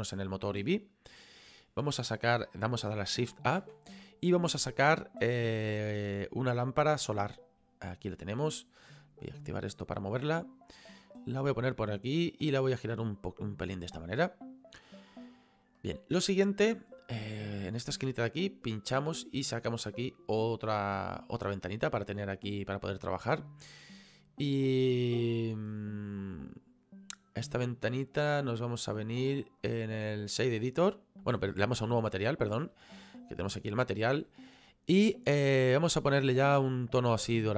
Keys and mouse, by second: 0.0 click, 3.6 shift+a, 7.2 click, 9.4 click, 10.4 click, 12.8 click, 18.4 click, 24.6 click, 29.6 click, 31.3 click, 33.0 middle click, 34.7 middle click, 35.8 click, 36.9 click.